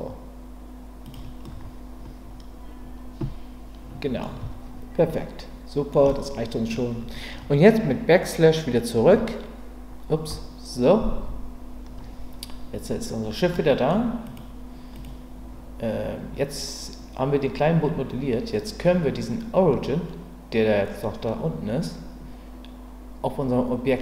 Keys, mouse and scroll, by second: 1.0 click, 1.5-4.2 middle drag, 4.4 Tab, 5.1-5.9 middle drag, 6.1-6.7 middle drag, 13.5 middle click, 14.9 click.